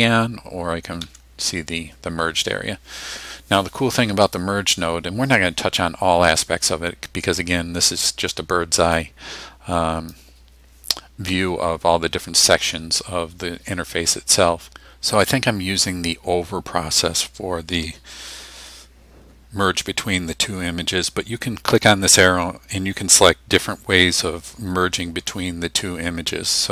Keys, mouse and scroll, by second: 1.0 2, 9.0 click, 21.8 click.